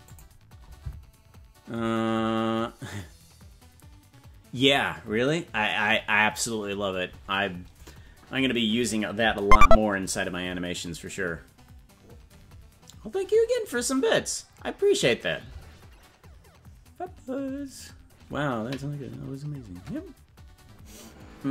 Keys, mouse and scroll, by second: 0.1 click.